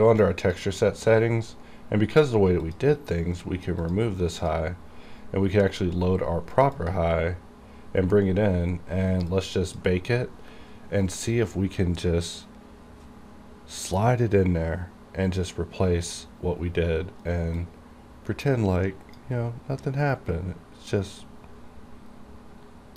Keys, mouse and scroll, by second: 2.7 click, 3.9 click, 4.5 click, 4.5 click, 6.8 click, 9.4-12.2 drag, 17.6-22.9 drag.